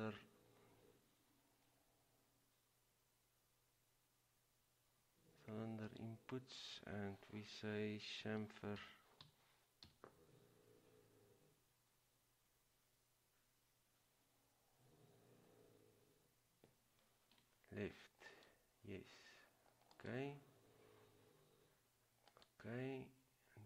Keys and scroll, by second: 8.4-10.0 typing.